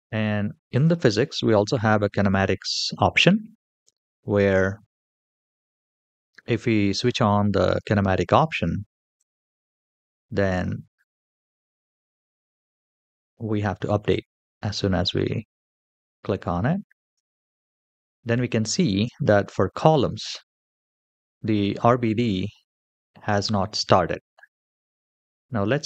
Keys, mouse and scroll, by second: 0.6 click, 9.0 click, 9.8 space, 11.6 space, 12.8 click, 13.9 click, 16.8 space, 18.8 space.